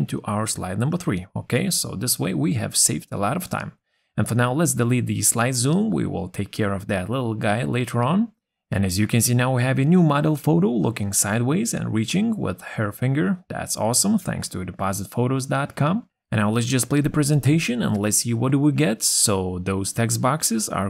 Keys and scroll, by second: 0.7 ctrl+v.